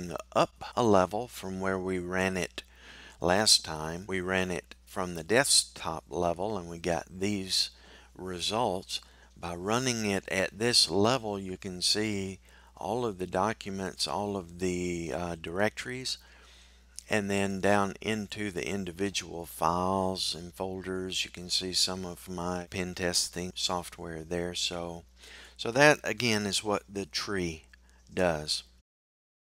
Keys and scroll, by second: 0.2 typing.